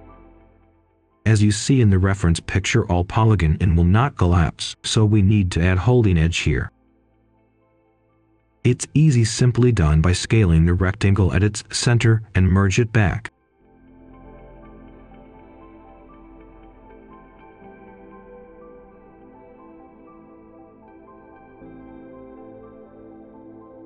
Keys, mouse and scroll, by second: 0.6-3.1 drag, 3.6 ctrl+shift+d, 4.0 h, 4.4 click, 5.2 ctrl+shift+d, 5.4-6.8 drag, 6.8 click, 8.5 ctrl+right click, 9.9 click, 10.1 scroll down 1, 10.3 scroll up 1, 10.5 right click, 12.2-12.7 scroll up 1, 12.7 click, 13.2 right click, 13.8 click, 14.1 middle click, 14.5 click, 15.8-17.0 typing, 17.4-23.8 drag, 21.0-22.1 typing.